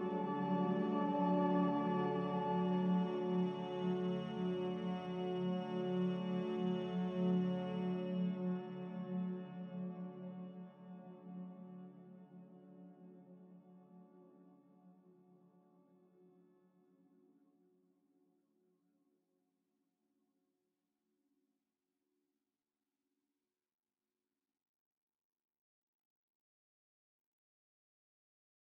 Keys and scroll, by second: 0.0-0.9 typing, 2.7-3.5 typing, 10.1-10.9 typing, 13.2-13.9 typing, 14.3 Return, 17.3 q, 23.5 a, 26.9 ctrl+k.